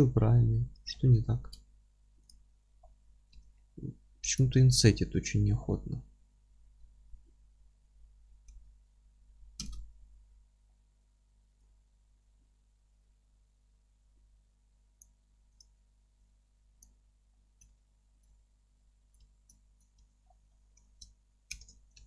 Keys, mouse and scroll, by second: 2.2 ctrl+a, 2.8 scroll down 1, 3.3 Tab, 4.2 alt+e, 9.7 KP_Enter, 10.2-10.6 scroll up 1, 11.7-15.6 drag, 16.2-17.6 drag, 17.3-17.6 scroll up 1, 17.6-22.0 alt+middle drag, 19.2 Tab, 19.9 Tab, 20.2 scroll down 1, 21.5 shift+n, 21.9 scroll up 1.